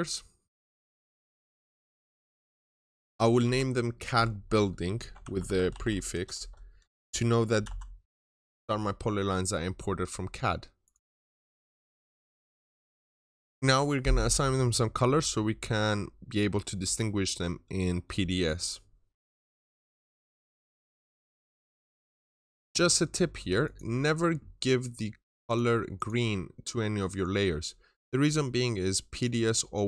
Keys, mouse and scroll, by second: 0.8 click, 2.2 shift+middle click, 2.6-3.3 typing, 4.0 middle click, 4.8 typing, 6.0 typing, 7.2-8.0 typing, 9.7 Return, 10.7 click, 11.1-11.6 typing, 12.5 click, 20.2 double click, 21.7 click, 25.8 double click, 26.8 click.